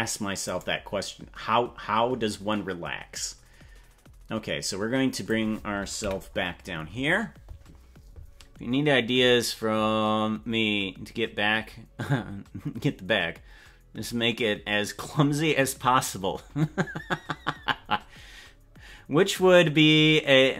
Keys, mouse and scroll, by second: 0.5 right click, 2.2-5.3 drag, 6.1 KP_Decimal, 6.6-7.0 scroll down 4.